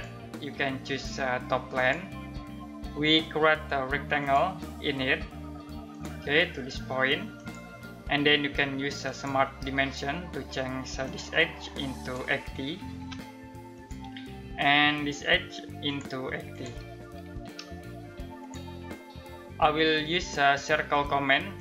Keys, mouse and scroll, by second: 12.1-13.0 typing, 13.3 click, 16.5-17.5 typing, 18.0 click, 21.1 click.